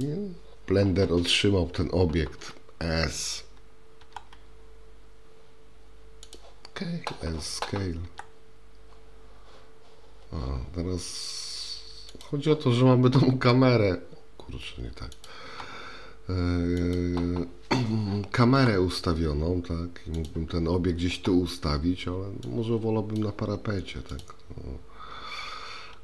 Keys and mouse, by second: 4.0 s, 8.1 s, 13.1 s, 15.5 s, 18.6 g, 22.5-23.2 drag, 24.1 click, 25.9 g.